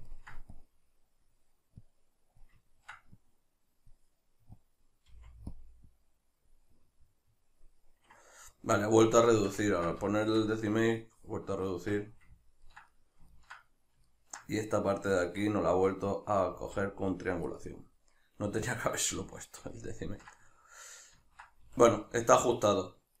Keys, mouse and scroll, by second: 0.5-2.7 drag, 2.7 ctrl+middle click, 3.2-5.6 drag, 5.1 f, 6.7-12.4 middle drag, 11.7 Tab, 16.5 z, 17.7 middle click, 19.1 z, 19.7-23.2 ctrl+middle drag, 21.7 a.